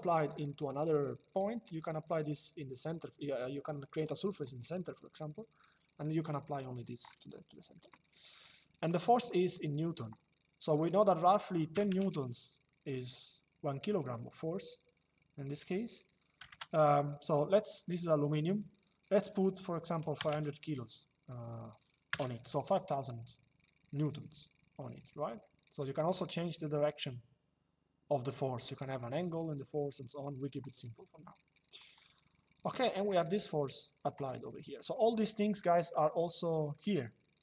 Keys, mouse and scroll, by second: 8.6 click, 11.4 KP_1, 16.1 BackSpace, 19.7 KP_5, 21.8 KP_0, 31.5 click, 36.5 click.